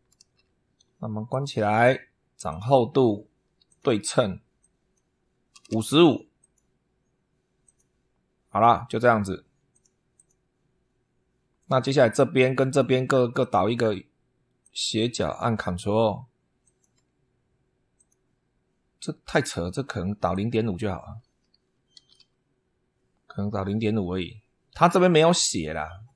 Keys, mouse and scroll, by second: 1.1 click, 2.2 click, 3.4 click, 4.4 click, 5.3 5, 6.2 click, 7.4 click, 9.5 click, 9.9 click, 13.2 click, 14.4 click, 16.4 ctrl+click, 17.7 click, 20.1 click, 21.5-22.4 typing, 25.2 click.